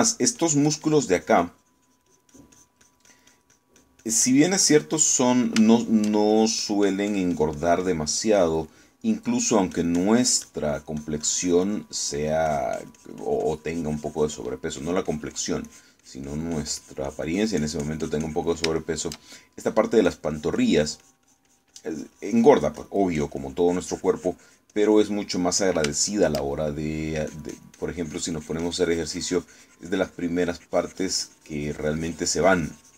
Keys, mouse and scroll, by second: 1.1 middle click, 1.4-6.3 drag, 6.6 shift+middle click, 7.4-9.7 shift+drag, 10.1 shift+middle click, 10.5-13.3 drag, 13.5-15.7 drag, 15.9-19.7 drag, 19.9 shift+middle click, 21.1-24.1 drag, 24.2-28.0 drag, 26.3 middle click, 28.3-32.9 drag.